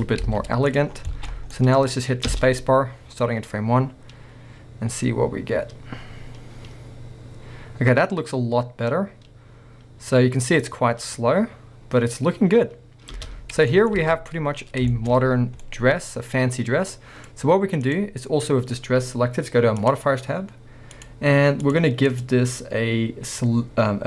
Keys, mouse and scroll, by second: 0.0 Tab, 0.0-10.6 middle drag, 0.2 z, 0.9-1.6 scroll down 4, 2.3 space, 13.4 space, 13.5 scroll down 1, 13.7 middle click, 13.9 scroll up 1, 14.0 alt+a, 14.5-17.4 middle drag, 14.6-14.9 scroll up 2, 15.4 scroll down 2, 17.4-17.9 scroll up 1, 17.9 click, 19.8 click, 20.9 click, 21.7 click, 22.1-24.0 drag.